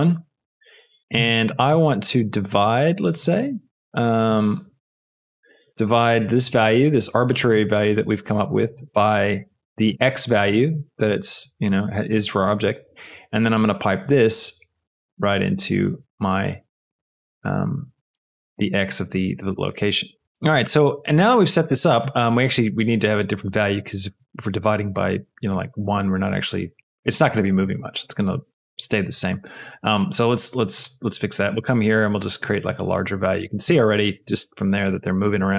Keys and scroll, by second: 0.4 Return.